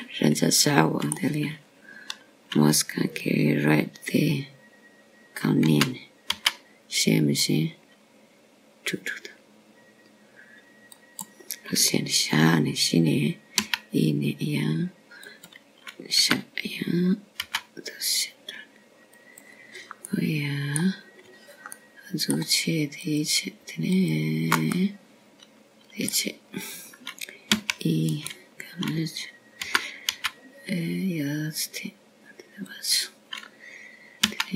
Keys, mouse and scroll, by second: 0.5 click, 1.4 shift+click, 2.8 middle click, 8.5 g, 16.4 e, 19.1 g, 22.9 middle click, 24.6 middle click, 25.9 click, 26.8 shift+click, 27.7 middle click, 30.6 e, 32.6 g.